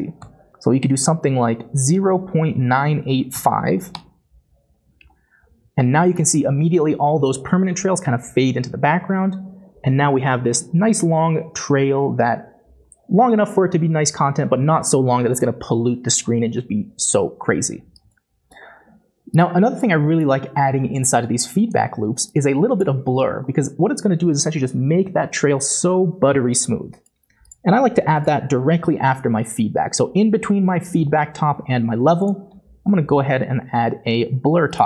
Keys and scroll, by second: 0.2 ., 2.5 9, 2.9 8, 3.3 5, 3.9 Return, 32.9-34.8 typing.